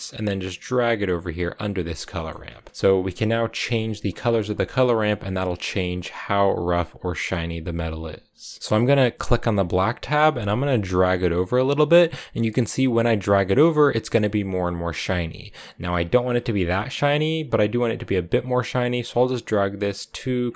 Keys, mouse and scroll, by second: 0.0-1.2 drag, 1.9 middle click, 2.1-2.5 scroll up 3, 2.5 click, 8.3 middle click, 8.6 scroll up 1, 9.2-12.3 drag, 17.6-20.5 drag.